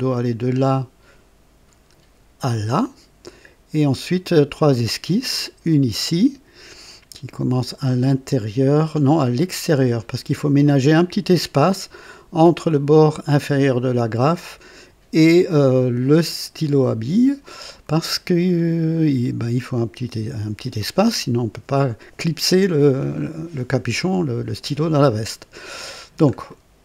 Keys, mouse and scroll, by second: 10.0-10.4 scroll up 2, 23.2 scroll down 2, 26.0 scroll down 2, 26.5 right click.